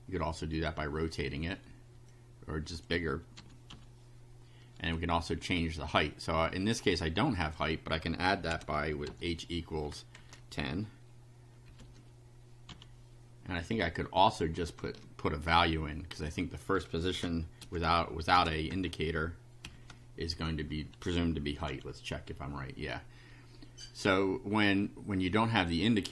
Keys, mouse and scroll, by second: 2.1 click, 3.4 4, 3.7 F5, 7.4 click, 8.5 h, 9.1 =, 10.2 KP_1, 10.3 KP_0, 11.7 ,, 12.7 F5, 13.6 scroll down 2, 13.7 scroll up 2, 14.0-14.6 scroll down 4, 16.1 click, 17.0-19.6 typing, 21.7 F5, 25.3 click.